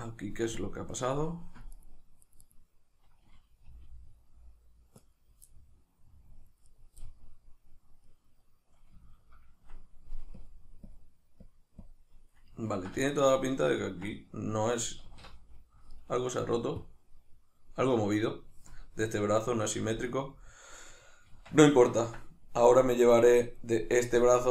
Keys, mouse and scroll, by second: 0.6-1.2 drag, 1.2 middle click, 1.8 right click, 2.2 right click, 2.4 right click, 3.7 g, 5.2 right click, 5.5-6.7 middle drag, 6.7 right click, 7.0-10.3 middle drag, 10.3-12.7 drag, 12.7-16.8 ctrl+middle drag, 15.1 alt+q, 16.8-20.9 drag, 21.3 Tab, 21.8-24.5 ctrl+middle drag.